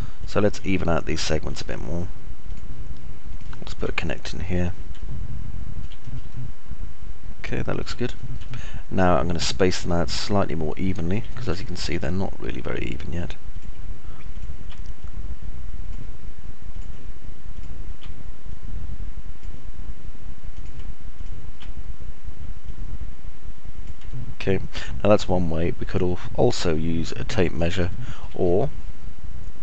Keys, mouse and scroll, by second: 0.0 alt+middle click, 5.3 alt+middle click, 6.7-8.2 alt+middle drag, 8.7 middle click, 9.0-11.7 alt+middle drag, 11.8 alt+middle click, 15.3 right click, 19.0 right click, 21.7 ctrl+right click, 24.7-28.0 alt+drag, 24.7-28.0 alt+middle drag, 24.7-28.0 alt+right drag, 28.2 alt+click, 28.2 alt+middle click, 28.2 alt+right click.